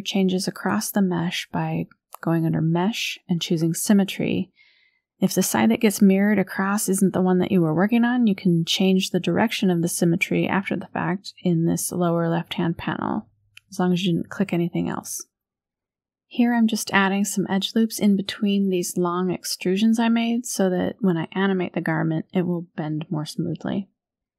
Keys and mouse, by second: 0.4-2.5 drag, 5.0 click, 6.0-8.3 drag, 10.0 shift+middle click, 11.7 shift+click, 13.3 ctrl+r, 18.4 ctrl+r, 22.7 click, 23.1 middle click, 23.5-24.3 drag.